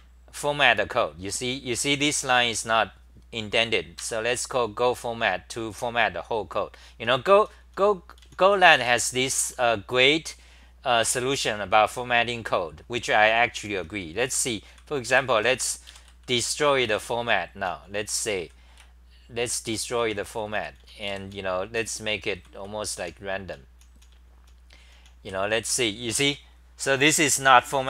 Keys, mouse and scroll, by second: 1.2 ctrl+g, 1.8 t, 2.3 2, 4.0 ctrl+g, 4.3 c, 7.0-10.1 typing, 11.8-13.6 scroll up 9, 13.8-18.4 typing, 20.0 Home, 20.1-25.9 typing, 26.0 Home.